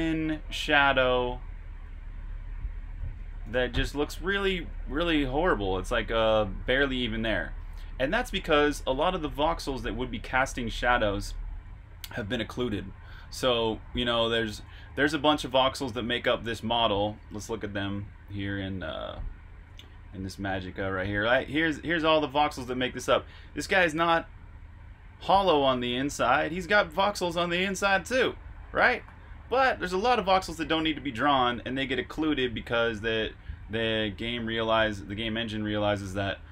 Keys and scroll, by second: 1.9-3.1 typing, 13.2-15.1 typing, 17.1 super+q, 18.0 super+Tab.